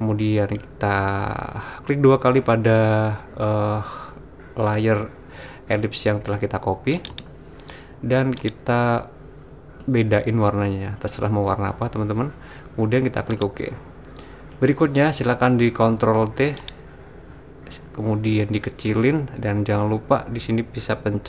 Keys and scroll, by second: 15.7 super+t.